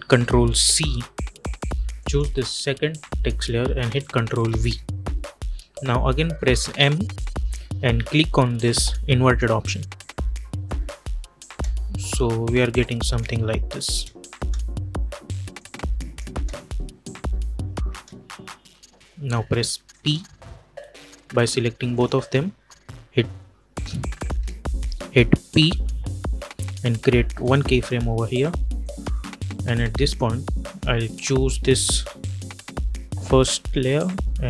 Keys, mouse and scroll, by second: 0.6 ctrl+c, 1.9 click, 4.3 ctrl+v, 6.6 m, 9.1 click, 11.4 space, 15.4 click, 16.2 space, 19.8 shift+click, 24.0 click, 24.5 shift+click, 25.5 p, 27.3 click, 32.0 v, 34.3-34.4 drag.